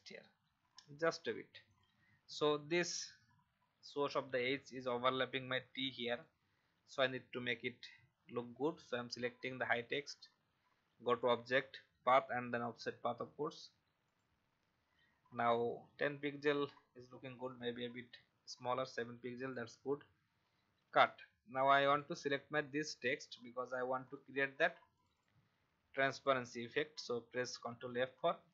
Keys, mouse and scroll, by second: 1.6 click, 2.5 alt+scroll up 1, 6.1 click, 17.3-19.3 scroll down 1, 19.3 click, 20.8 ctrl+x, 21.8 click, 27.7 ctrl+f.